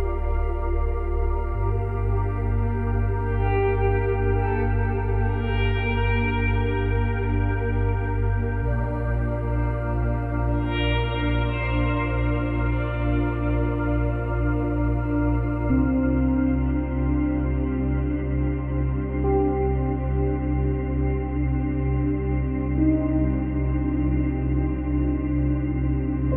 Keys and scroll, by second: 2.8 Delete, 5.3 Delete, 7.6 Delete, 17.3 space, 20.2 space, 21.0 ctrl+c, 21.2 ctrl+v, 25.1 ctrl+c, 25.4 ctrl+v.